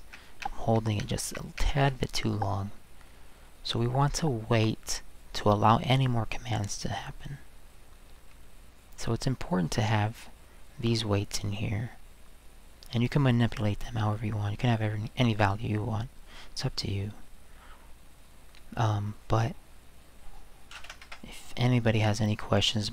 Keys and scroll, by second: 1.0 Escape, 1.6 Escape, 20.5-21.3 typing.